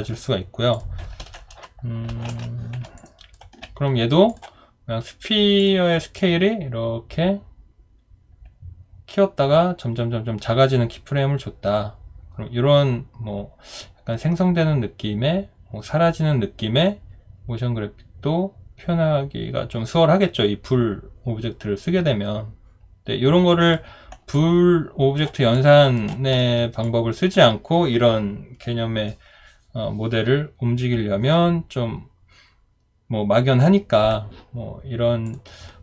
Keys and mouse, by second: 3.0 alt+click, 24.3 alt+click, 25.5 alt+click, 26.4 alt+middle click, 26.8 alt+click.